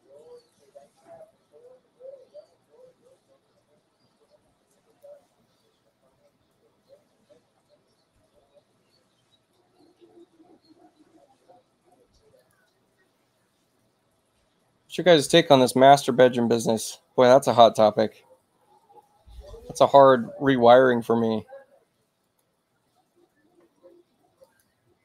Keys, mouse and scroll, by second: 4.8 click, 12.3 click, 19.8 click, 22.1 click, 24.3 click.